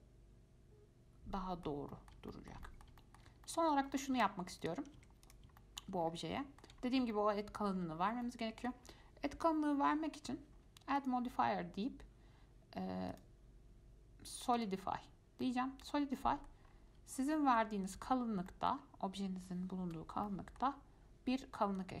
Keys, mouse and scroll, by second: 3.5 scroll down 1, 3.7-4.4 middle drag, 4.4 Tab, 4.8 click, 5.2 Tab, 5.4 click, 5.8-6.3 shift+middle drag, 6.3-6.6 scroll up 5, 6.6 shift+middle click, 7.0 scroll up 2, 7.3 shift+middle click, 8.2 scroll down 2, 8.4 middle click, 8.9-9.4 scroll up 1, 11.2-15.6 drag, 15.6-16.1 middle drag, 16.1 scroll down 1, 16.4-16.9 middle drag, 16.9-17.4 scroll up 1, 17.4 scroll up 1, 17.6 shift+middle click, 18.3-18.7 scroll down 1, 18.7-20.1 shift+middle drag, 20.1 F5, 20.5-22.0 middle drag.